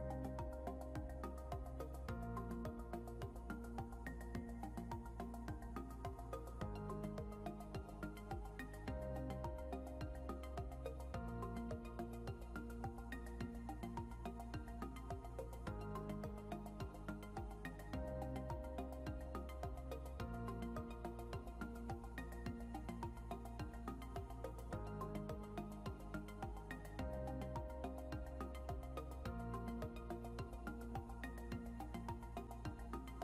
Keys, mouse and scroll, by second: 1.7 typing, 4.4-5.8 typing, 11.5-13.1 typing, 16.0-17.4 typing, 17.5 Return, 19.1-21.0 typing, 23.3 typing, 26.8-29.0 typing.